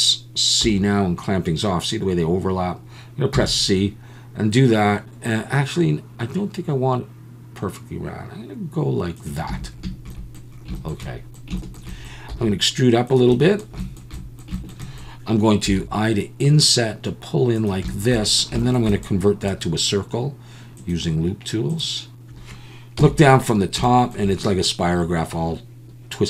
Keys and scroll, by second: 0.6 c, 3.3 c, 9.5 a, 12.3 e, 15.7 i, 23.0 KP_7.